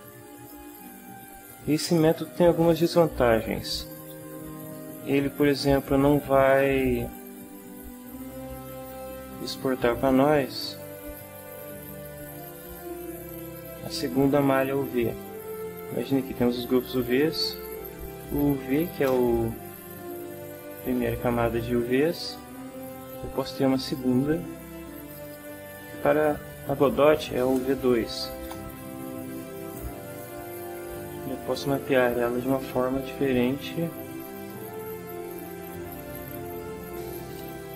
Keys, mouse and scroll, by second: 7.6 Tab, 10.6 click, 12.4 click, 13.6 click, 16.9 click, 18.1 shift+u, 18.8 shift+v, 19.1 shift+Return, 23.9 click, 25.1 click, 27.2 shift+u, 27.6 shift+v, 28.2 shift+2, 28.4 Return, 32.0 u, 34.3 click, 37.3 ctrl+Up.